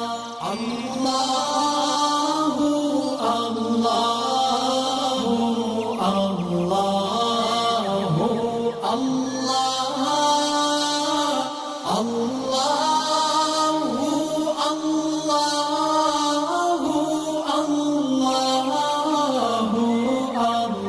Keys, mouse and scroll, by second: 0.8 alt+scroll down 1, 1.3 click, 4.0 click, 4.0 shift+click, 7.7 click, 8.4-8.8 alt+scroll up 2, 9.4 alt+scroll up 1, 9.6 space, 9.7 click, 17.3 alt+scroll down 1, 17.8 space, 17.9 click, 19.6 space, 19.7 click.